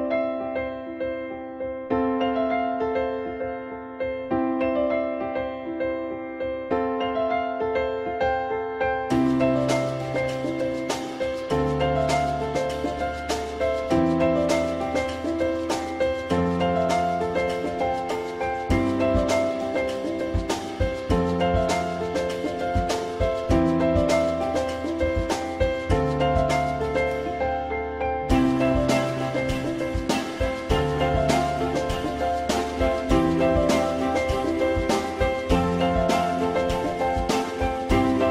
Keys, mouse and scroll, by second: 1.5 shift+click, 2.5 alt+middle click, 4.3 ctrl+click, 4.7 alt+middle click, 5.9 ctrl+middle click, 6.5 alt+middle click, 6.5 ctrl+click, 6.9-7.5 typing, 10.9 alt+click, 13.0 ctrl+z, 17.9 alt+middle click, 20.6 alt+scroll down 1, 21.0 alt+middle click, 22.7 alt+middle click, 29.1 ctrl+middle click, 29.7 alt+middle click, 32.8 click.